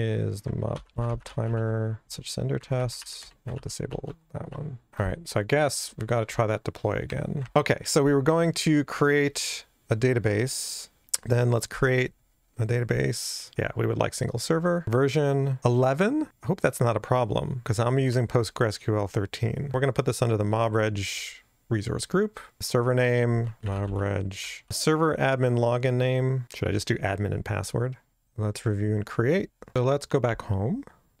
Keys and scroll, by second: 0.7 Return, 0.7 super+o, 2.0 super+o.